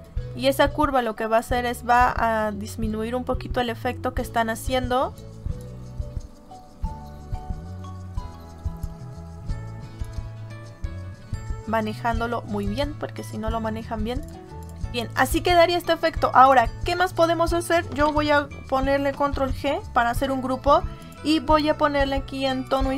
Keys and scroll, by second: 17.9 ctrl+g, 19.2 ctrl+g.